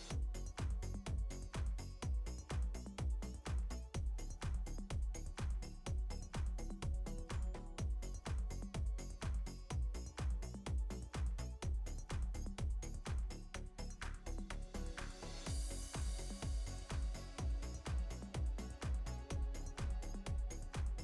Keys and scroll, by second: 7.8 space, 10.6 space, 14.0 space, 16.5 space, 18.4 ctrl+space, 18.6 ctrl+space, 19.5 ctrl+space.